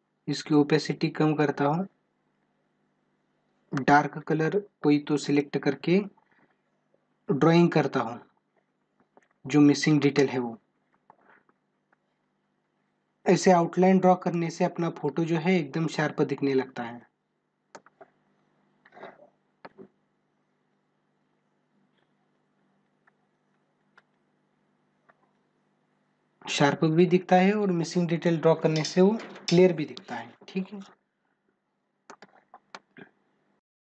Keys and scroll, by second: 10.3 ctrl+alt+z, 14.5 space, 18.0 space, 32.3 space.